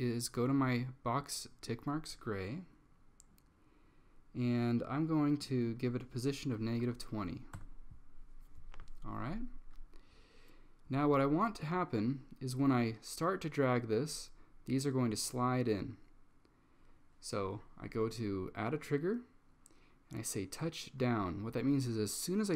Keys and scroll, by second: 6.7-7.5 typing, 7.7 Return.